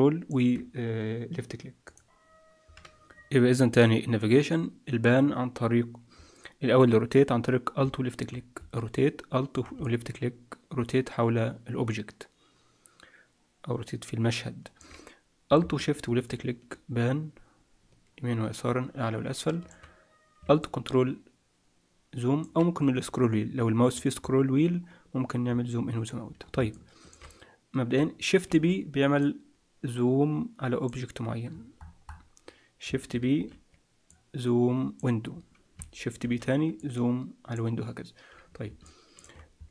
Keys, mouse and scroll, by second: 8.9 click, 9.8 middle click, 15.7 shift+middle click, 20.6 ctrl+middle click, 22.7-23.2 scroll up 1, 23.2-23.7 scroll down 1, 23.7 scroll down 5, 23.9-24.5 scroll up 8, 24.5-25.2 scroll down 1, 25.2 scroll down 4, 25.4-26.2 scroll up 2, 26.2-26.7 scroll down 2, 26.7 shift+middle click, 28.4 shift+b, 31.4-32.8 scroll down 17, 32.8-33.3 scroll down 6, 33.3 shift+b, 36.2 shift+b, 38.8 shift+middle click.